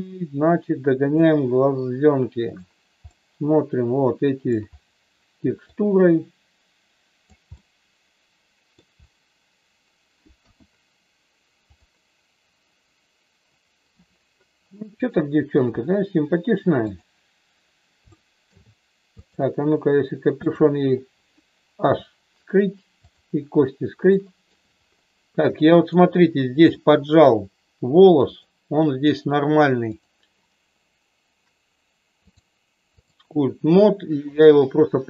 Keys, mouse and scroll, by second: 3.0-4.5 middle drag, 5.7-7.3 drag, 7.4-8.7 middle drag, 10.4 KP_1, 15.1 shift+middle click, 16.7 click, 18.2 shift+middle click, 19.2 click, 20.5 click, 21.8 h, 24.1 shift+middle click, 25.6 shift+middle click, 26.7 middle click, 28.2 click, 29.9 click, 32.3-33.3 drag.